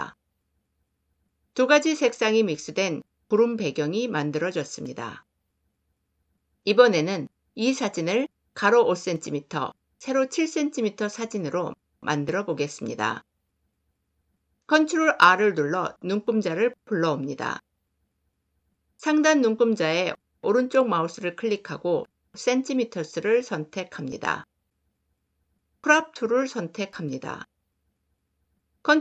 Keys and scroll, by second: 14.4 ctrl+r, 25.5 c.